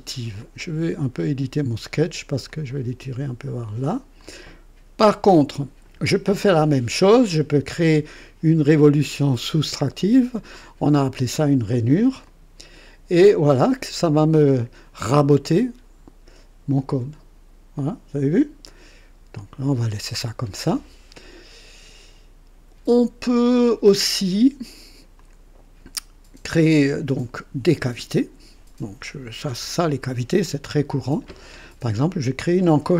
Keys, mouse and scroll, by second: 0.4 click, 2.4-3.7 drag, 4.2 click, 12.2 click, 13.9-18.2 drag, 19.3 click, 20.5-23.3 drag, 23.3 right click, 25.1-27.4 drag, 29.4 KP_2, 30.4-31.4 right drag.